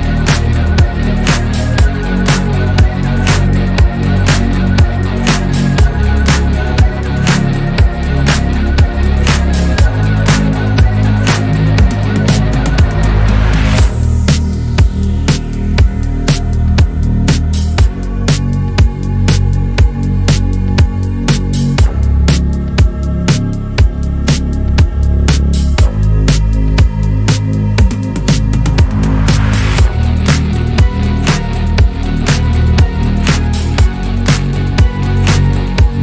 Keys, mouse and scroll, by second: 1.5 shift+d, 3.1 click, 3.7 drag, 4.7 z, 6.2 alt+z, 7.1 g, 7.8 click, 8.5 scroll down 2, 9.2 alt+z, 10.0 click, 10.5 Tab, 11.1 alt+z, 12.0 1, 12.3 click, 15.0-17.0 drag, 17.2 middle click, 18.1 click, 18.7 click, 20.2-22.2 middle drag, 22.2 KP_3, 23.5-24.9 scroll up 1, 25.3 g, 29.0 click, 32.3 Tab, 32.5 drag, 32.9 click, 34.8 s.